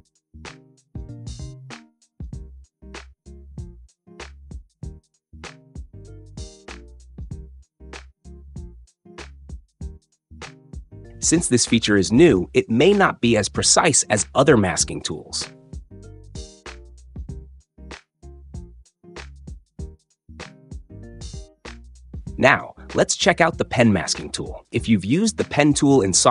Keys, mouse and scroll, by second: 0.7 click, 7.5 click, 9.2 click, 9.9 space, 15.3 click, 16.0 space, 18.0 space, 18.9-19.9 drag, 22.0-23.0 drag.